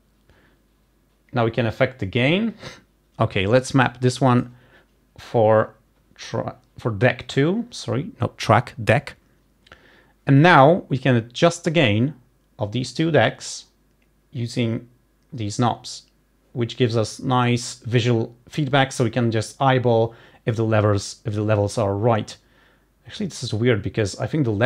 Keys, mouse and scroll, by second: 4.1 click.